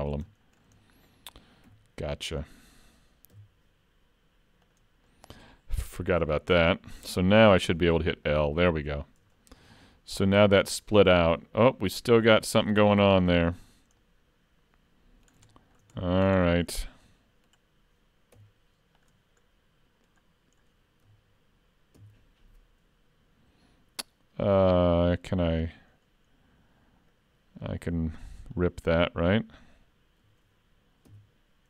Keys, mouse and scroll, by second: 0.3 middle click, 0.8 shift+middle click, 1.7 3, 2.3 click, 3.5 x, 5.1 middle click, 6.1 scroll down 2, 6.3 shift+middle click, 7.8 l, 8.3 middle click, 9.1 scroll up 2, 9.7 shift+middle click, 10.4 click, 13.4 ctrl+z, 14.0 middle click, 15.3 scroll up 1, 15.5 shift+middle click, 16.0 middle click, 16.7 shift+middle click, 16.8 scroll up 3, 17.1 middle click, 18.4 1, 19.4 click, 19.4 middle click, 22.0 ctrl+v, 27.7 middle click, 28.6 click, 31.1 ctrl+v.